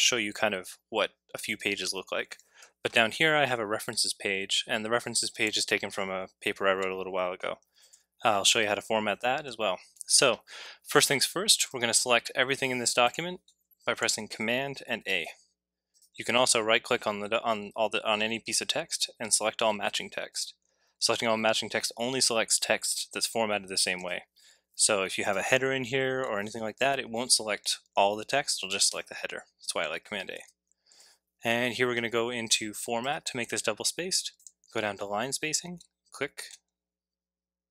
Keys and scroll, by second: 15.1 a, 30.3 super+a.